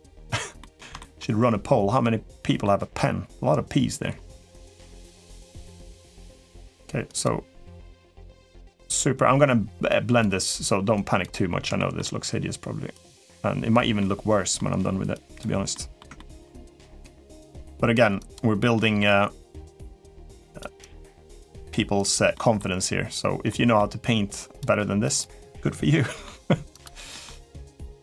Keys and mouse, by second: 0.4 middle click, 0.7 shift+middle click, 2.2 middle click, 4.9 click, 6.1 middle click, 6.8 click, 7.6 middle click, 8.1 click, 9.6 click, 10.7 click, 11.5 shift+middle click, 12.7 click, 13.8 middle click, 14.9 click, 15.5 middle click, 15.9 shift+middle click, 16.5 click, 17.0 click, 17.5 click, 17.9 click, 18.6 middle click, 19.6 middle click, 20.1 click, 20.5 click, 20.8 click, 21.1 click, 21.7 click, 22.1 middle click, 23.3 middle click, 24.1 click, 24.8 click, 25.7 middle click, 26.5 click, 26.9 middle click, 27.4 click, 27.9 click.